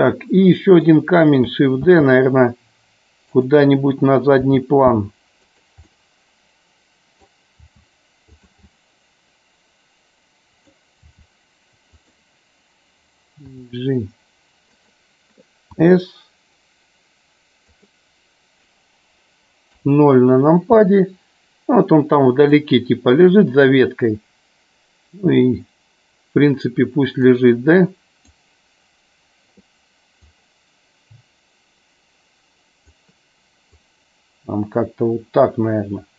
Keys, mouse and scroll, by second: 2.1 shift+d, 3.5 click, 4.5 r, 6.0-7.5 middle drag, 7.7 r, 8.3 click, 8.9-11.0 middle drag, 12.1 click, 13.6 g, 15.9 s, 17.9 click, 19.9 KP_0, 22.6-25.4 drag, 27.5 click, 30.2-33.1 drag, 33.8-36.1 drag.